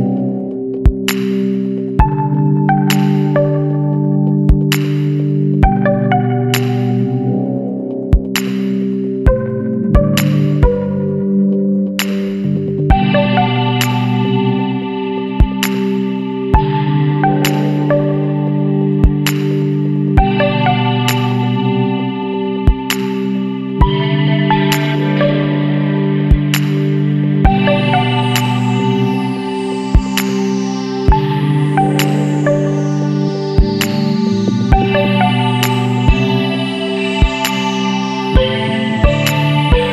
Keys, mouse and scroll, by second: 0.5 click, 1.3 KP_9, 1.5 KP_0, 4.6 click, 6.6-6.9 scroll up 2, 8.4 Down, 9.1 click, 10.0 Down, 10.2 Left, 11.7 Down, 12.0 Left, 12.6 scroll up 2, 13.2 Up, 13.7 Right, 15.5 click, 16.7 ctrl+click, 18.6 click, 23.4 click, 25.6 ctrl+click, 26.9 click, 28.9 scroll up 1, 30.0 Down, 30.6 click, 31.0 Down, 31.7 scroll up 2, 32.0 Down, 32.4 Right, 36.0 click, 39.0 click.